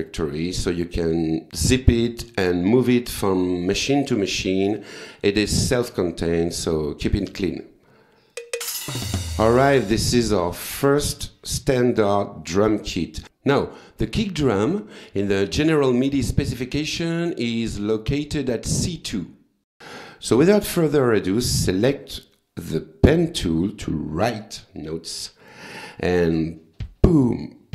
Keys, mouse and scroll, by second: 8.3-9.4 drag, 11.1-11.6 scroll down 2, 18.2 click, 18.7 click, 22.0 click, 26.8 click.